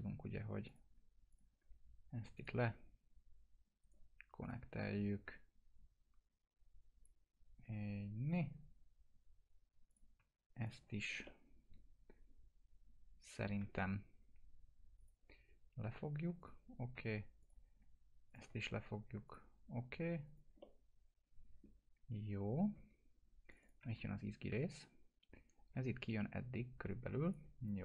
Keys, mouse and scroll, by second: 0.7 shift+click, 2.4 click, 3.8 right click, 4.4 click, 4.5-7.3 drag, 8.3 click, 10.7 shift+click, 11.3-13.5 alt+middle drag, 15.0 click, 18.3 shift+click, 18.3 shift+click, 19.3 click, 20.6 alt+middle click, 20.6-21.9 alt+middle drag, 23.5 click, 23.6-24.5 typing, 24.6-25.8 drag.